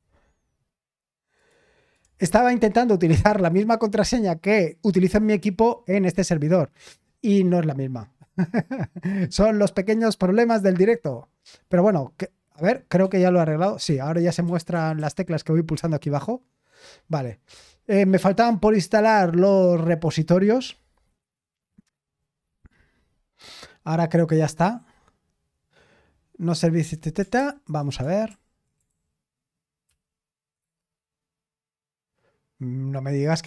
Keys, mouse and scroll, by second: 13.1 d, 14.5-15.0 typing, 27.4 ctrl+p, 28.3 super+l, 28.9 ctrl+p, 29.8 ctrl+p, 30.6 Return.